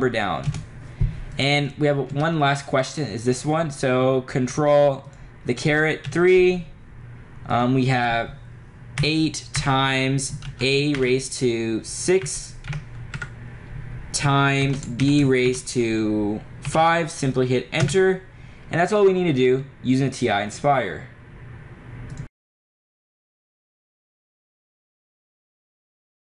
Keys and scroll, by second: 0.0 4, 0.5 BackSpace, 2.2 BackSpace, 5.2 ^, 6.1 3, 9.1 8, 9.7 *, 11.0 ^, 12.3 6, 13.2 Right, 14.7 *, 15.6 ^, 16.7 5, 17.9 Return.